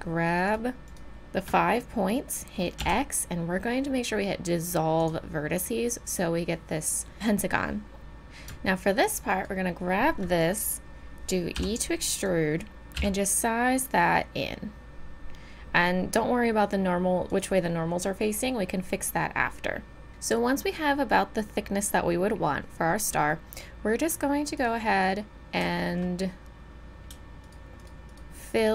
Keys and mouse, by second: 2.8 x, 8.0 ctrl+z, 11.5 e, 12.9 s, 20.1 ctrl+z, 20.1 a, 24.6-26.5 drag, 27.4-28.7 drag.